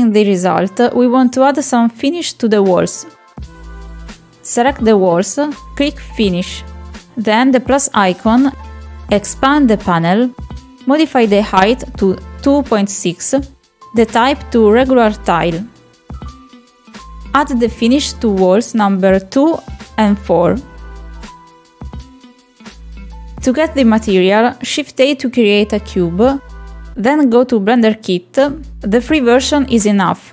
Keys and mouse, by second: 1.0 middle drag, 1.3 shift+middle click, 2.4 middle click, 2.8 shift+middle drag, 6.7 click, 7.2 click, 7.7-9.5 drag, 9.8 click, 11.3 shift+middle drag, 12.3 click, 15.8-17.2 drag, 21.1 click, 21.9 click, 22.9 click, 23.6 click, 25.9 shift+middle drag, 27.0 shift+middle click, 27.9 shift+a.